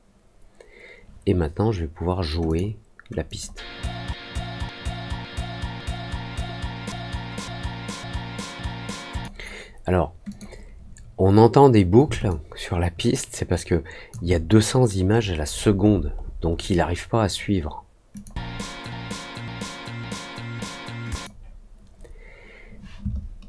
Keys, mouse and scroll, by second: 2.4 click, 3.2 click, 9.0 click, 10.2 click, 12.2-14.0 alt+drag, 15.1 middle click, 15.4 middle click, 15.8 middle click, 16.1 middle click, 16.4 middle click, 18.1 click, 21.0 click.